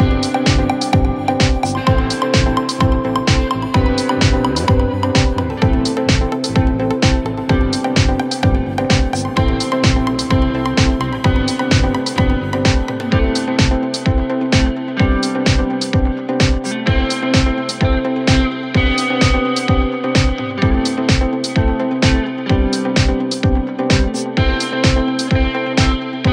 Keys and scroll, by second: 4.8 Escape.